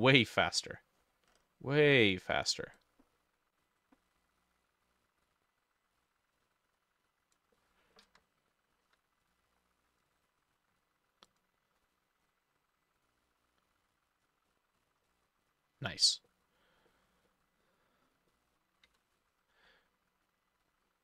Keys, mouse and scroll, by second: 0.5 middle click, 1.0-3.8 scroll up 10, 7.6 middle click, 8.9 ctrl+d, 14.5-20.9 drag, 14.5-15.1 scroll down 10, 15.1 middle click, 15.5-16.3 scroll down 4, 16.3 middle click, 16.9 middle click, 18.8 ctrl+middle click, 18.9 ctrl+s.